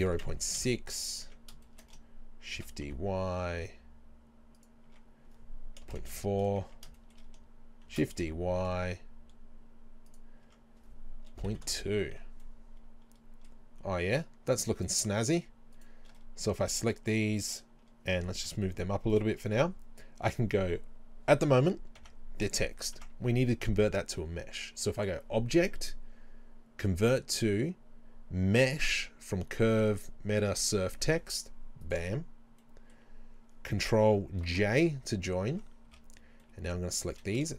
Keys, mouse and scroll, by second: 0.0 KP_0, 0.3 KP_6, 0.6 KP_Enter, 1.3 Tab, 1.9-4.7 middle drag, 2.5 shift+d, 4.7 click, 4.9 Tab, 5.9 BackSpace, 6.0 KP_4, 6.2 KP_Enter, 6.7 Tab, 7.0-10.2 middle drag, 7.9 shift+d, 10.2 click, 10.5 Tab, 11.3 BackSpace, 11.5 KP_2, 11.7 KP_Enter, 12.5-14.1 middle drag, 14.1 shift+right click, 15.3 shift+right click, 15.8 shift+right click, 16.2-25.0 middle drag, 18.2 g, 19.2 click, 19.4 scroll down 1, 22.0 Tab, 25.0-32.6 drag, 32.8-34.5 middle drag, 34.5 ctrl+j, 35.6 Tab, 36.3 scroll up 2, 36.5 middle click, 37.2 e.